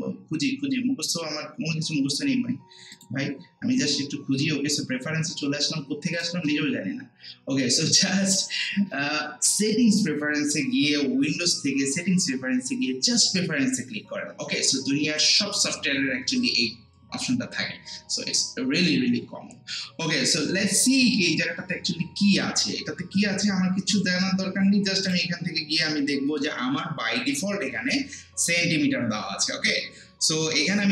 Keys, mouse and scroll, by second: 2.9 click, 6.1 click, 25.0 click.